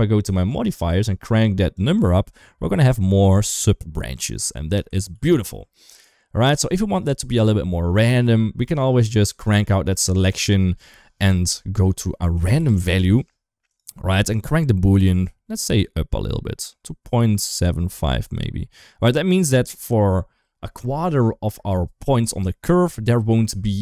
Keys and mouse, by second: 0.3 click, 1.6-4.6 drag, 5.0 ctrl+z, 5.7 ctrl+s, 6.8 shift+middle click, 8.1 shift+middle click, 9.7 click, 9.9-13.6 drag, 14.2-16.9 drag, 17.6-19.6 drag.